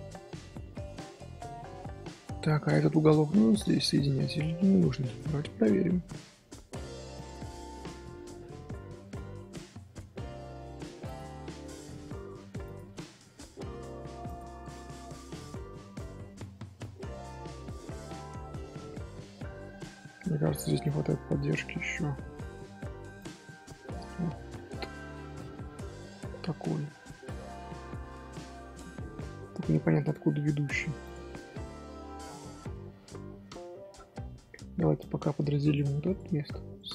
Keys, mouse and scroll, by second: 0.1 middle click, 0.4 scroll up 1, 0.7 shift+middle click, 1.2 scroll up 1, 1.4 middle click, 2.2 scroll up 1, 2.6-3.5 middle drag, 3.5 click, 3.9 shift+click, 4.9 j, 7.2 click, 7.7-9.0 middle drag, 9.0 Tab, 15.0-15.7 middle drag, 15.7 scroll down 3, 16.3 ctrl+z, 16.5-17.1 middle drag, 17.1 ctrl+z, 17.6-19.9 middle drag, 19.9-20.7 scroll up 1, 20.7 z, 21.6 middle click, 22.1 z, 23.1 click, 24.5 middle click, 25.2 scroll down 2, 25.6-27.8 middle drag, 27.8 ctrl+r, 28.9 scroll down 1, 28.9 scroll up 1, 29.0 scroll down 1, 29.1 middle click, 29.7 ctrl+r, 33.0-34.1 middle drag, 34.1 2, 34.4-34.9 scroll up 1, 34.9 click, 36.7 right click.